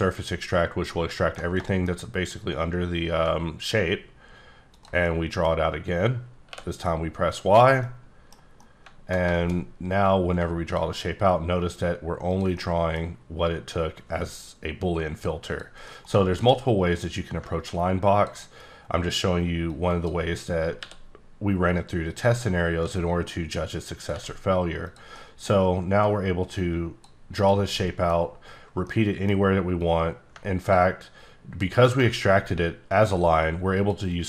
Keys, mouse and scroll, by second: 2.4 click, 5.0 middle click, 6.5 y, 7.4 click, 7.8 middle click, 8.4 scroll down 1, 8.6 middle click, 10.3 click, 12.9-13.2 middle drag, 15.5 click, 16.2-16.5 alt+middle drag, 17.0 click, 19.9 ctrl+right click, 20.8 r, 22.1 click, 22.8 s, 24.0 click, 24.1 g, 24.8 click, 25.1 middle click, 26.0 click, 27.4 click, 27.7 middle click, 28.8 middle click, 29.8 click, 33.8 click.